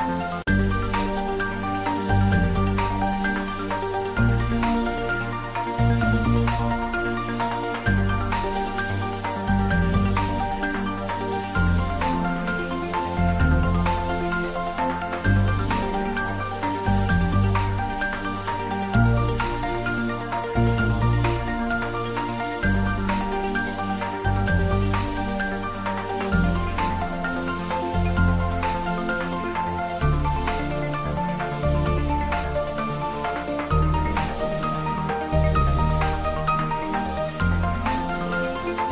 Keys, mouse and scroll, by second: 0.7 ctrl+middle click, 1.1 shift+middle click, 1.5 ctrl+middle click, 2.0 shift+middle click, 2.7 ctrl+middle click, 3.1-4.9 shift+middle drag, 4.9 g, 6.3 click, 6.5 s, 7.6 click, 8.3 g, 9.7 click, 9.9 ctrl+middle click, 10.4 shift+middle click, 10.8 ctrl+middle click, 11.1 shift+middle click, 12.0 g, 13.6 z, 14.0 click, 14.4 g, 16.8 click, 17.4 s, 19.2 click, 19.5 s, 20.2 click, 20.5 g, 23.2 Up, 24.1 click, 24.6 ctrl+s, 24.9-27.1 middle drag, 27.1 click, 28.8 ctrl+middle click, 29.8 click, 30.8 ctrl+middle click, 31.3 shift+middle click, 31.8 ctrl+middle click, 32.2 shift+middle click, 33.3 g, 35.8 click, 36.0 ctrl+s, 38.0 click, 38.3 ctrl+s, 38.5-38.9 ctrl+middle drag.